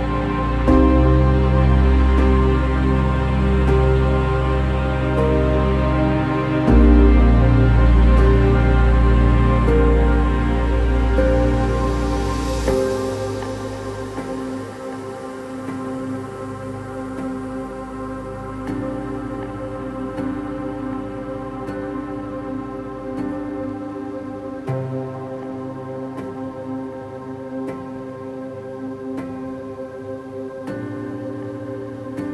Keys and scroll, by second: 3.7 ctrl++, 3.8 ctrl++, 4.6 ctrl++.